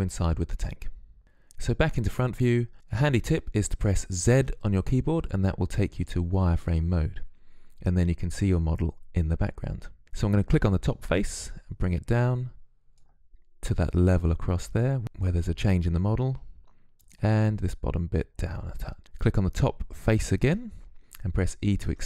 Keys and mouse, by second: 3.3 z, 10.5-15.9 drag, 15.9 right click, 16.6-17.7 middle drag, 17.7 click, 18.5-20.9 right drag, 20.9 e.